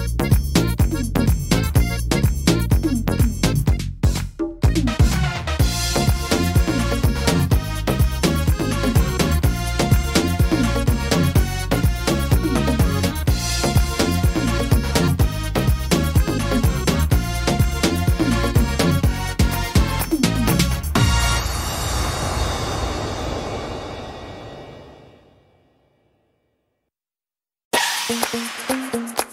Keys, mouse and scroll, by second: 3.1 middle click, 3.4 scroll down 2, 3.8 middle click, 4.7-5.3 scroll down 4, 5.3 middle click, 6.3-7.0 scroll up 5, 7.0 middle click, 7.5 shift+middle click, 7.8 scroll up 2, 8.4 shift+middle click, 9.7 click, 12.0 middle click, 12.4-13.2 scroll down 5, 13.0 middle click, 13.6 scroll up 4, 14.1 shift+middle click, 14.6 scroll up 2, 15.2 middle click, 15.7 right click, 18.0 click, 18.9 right click, 20.0 shift+right click, 20.7 click, 22.4 ctrl+z, 23.4 click, 24.3 click, 25.7 middle click, 26.0-26.5 scroll down 6, 26.7 middle click, 27.0-27.5 scroll down 4, 27.8 shift+middle click, 28.2 scroll down 1, 28.6-29.3 scroll up 3.